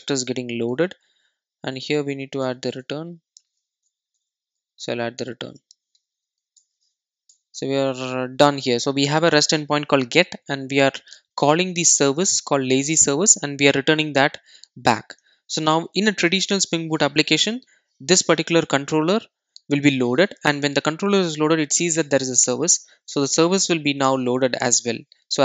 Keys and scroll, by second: 4.2 Tab, 10.5 alt+super+l, 16.3 super+s, 23.8 super+b.